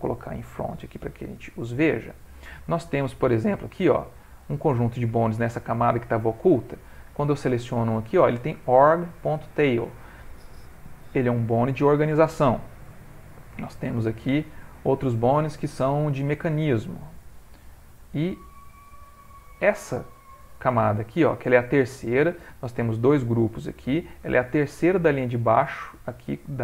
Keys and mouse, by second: 0.0 click, 1.2 middle click, 3.9 click, 7.1 click, 13.5 click, 15.2 click, 18.8 click, 19.1 click.